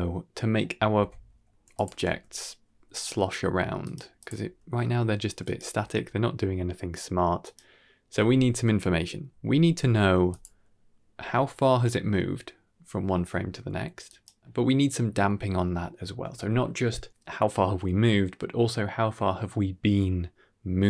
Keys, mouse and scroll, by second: 0.9 ctrl+space, 1.1-1.6 scroll down 4, 1.6-1.9 drag, 1.9 g, 4.1 click, 4.3 g, 5.6 r, 10.2 click, 11.0 g.